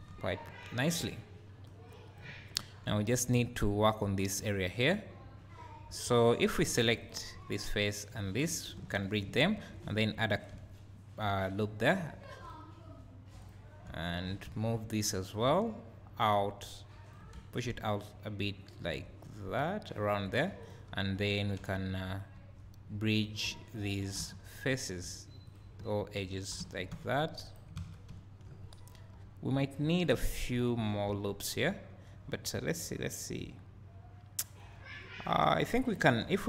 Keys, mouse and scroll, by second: 1.5 Tab, 1.7-7.1 drag, 2.5-2.9 scroll up 2, 2.9 1, 3.3-5.4 scroll up 2, 5.4-6.7 scroll down 2, 6.7 2, 8.1 shift+click, 8.8 f, 9.5 ctrl+r, 10.5 `, 13.5-20.7 drag, 14.4 `, 17.3 `, 20.3 3, 21.6 2, 22.2 click, 23.1 click, 23.8 shift+click, 24.2 f, 24.7 click, 26.2 shift+click, 26.7 f, 26.9 g, 27.5 right click, 27.8 alt+a, 28.1 `, 30.1 KP_3, 31.1 1, 36.2 2.